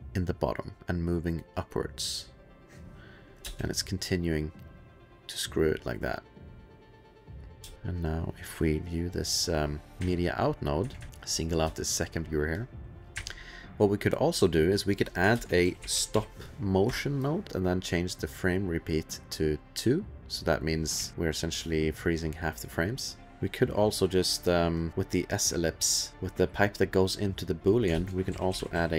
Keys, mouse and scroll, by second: 3.4 space, 7.6 space, 7.7 click, 7.7 2, 8.0 middle click, 8.3 middle click, 8.7 middle click, 9.6 middle click, 10.0 2, 10.5 middle click, 10.9 space, 11.3 click, 11.4 space, 11.7 click, 11.9 click, 12.5 click, 13.1 2, 15.4-17.4 typing, 16.9 Return, 17.4 click, 18.9 click, 21.0 ctrl+s, 21.1 click, 22.2 click, 22.7 click, 23.3 click, 24.9 click, 25.3 click, 26.1 middle click, 26.1 click, 27.7 click, 28.0-28.9 typing.